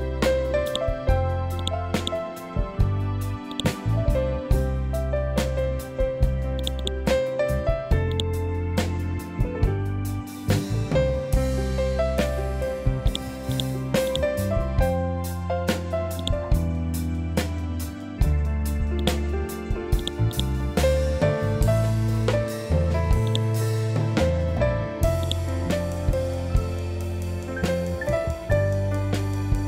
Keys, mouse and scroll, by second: 0.6 click, 4.1 ctrl+z, 6.5 click, 8.9-10.0 typing, 11.0-12.2 typing, 13.0-16.1 drag, 16.1 right click, 18.9 click, 20.2 right click, 23.2-29.6 drag.